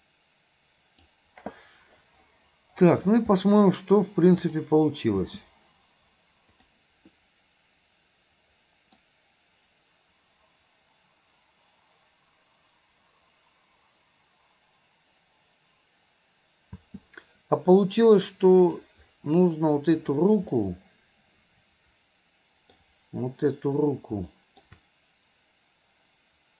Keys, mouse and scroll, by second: 4.5 click, 5.3 space, 6.7 click, 7.3-9.2 middle drag, 16.8 space, 18.7 click, 20.0 click, 20.5-22.8 middle drag, 24.4 middle click.